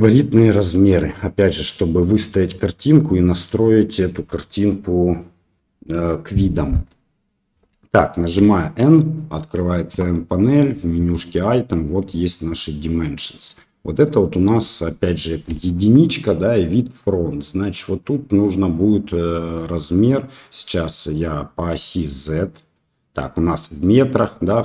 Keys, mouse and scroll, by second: 8.3 n, 11.8-13.2 middle drag, 13.9 click, 14.6 click, 15.4 KP_1.